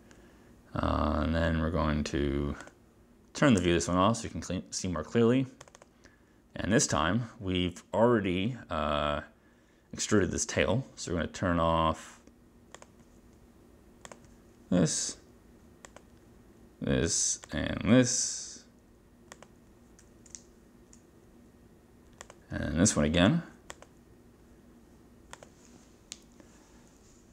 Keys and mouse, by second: 2.7 click, 3.7 space, 5.7 click, 5.8 click, 12.8 click, 14.1 click, 15.9 click, 17.5 click, 19.5 click, 22.4 click, 23.9 click, 25.5 click.